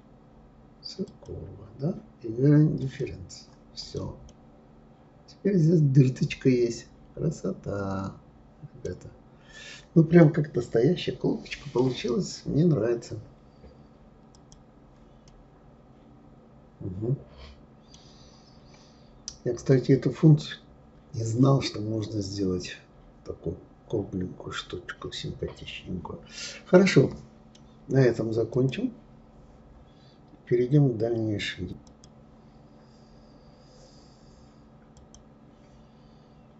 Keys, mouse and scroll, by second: 2.8 click, 3.8 click, 4.3-7.3 middle drag, 8.9-10.2 scroll down 4, 10.2-13.2 middle drag, 14.3 click, 15.3-18.2 middle drag, 18.2-18.9 scroll up 4, 19.2-19.7 scroll down 2, 19.7-22.8 middle drag.